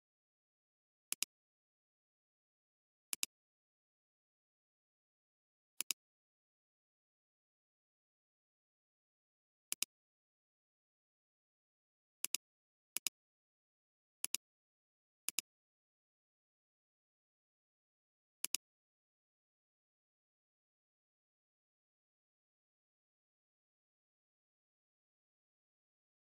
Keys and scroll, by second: 9.7 alt+space, 10.5 alt+space, 12.2 alt+space, 14.8 space, 18.4 alt+space, 19.1 alt+space.